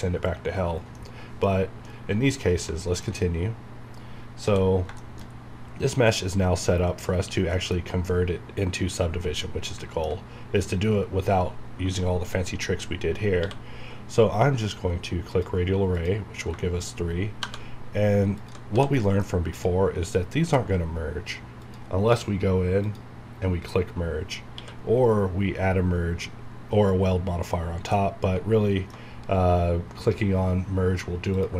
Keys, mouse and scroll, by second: 0.9 middle click, 1.0 middle click, 1.5-1.8 scroll down 1, 1.8 middle click, 3.1 alt+scroll down 2, 4.4 scroll up 1, 5.0-7.5 shift+middle drag, 7.8-9.3 scroll up 1, 12.1 scroll down 1, 13.4 q, 15.3 click, 16.2 scroll down 1, 16.6 shift+middle click, 16.9 scroll up 1, 17.4 1, 18.4 click, 18.7 h, 19.0 middle click, 19.5 click, 22.0 scroll down 1, 22.8 click, 23.2-24.5 scroll down 1, 24.5 q, 27.9-31.3 middle drag, 31.3 click.